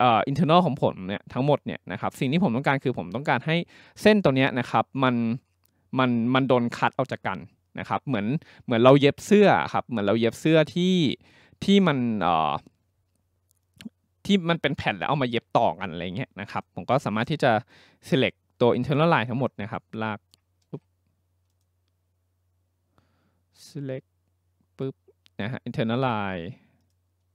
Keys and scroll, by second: 20.6 ctrl+z.